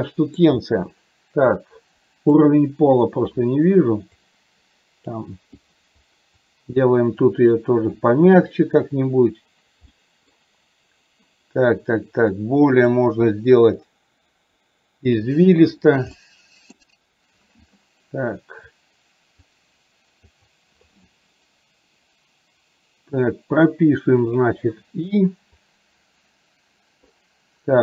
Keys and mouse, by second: 1.6 click, 4.2 click, 5.8 click, 6.4 click, 7.3 click, 10.0 middle click, 12.4 click, 13.8-15.3 drag, 16.1 middle click, 18.9 click, 20.4 click, 24.3 click, 25.7-27.3 drag.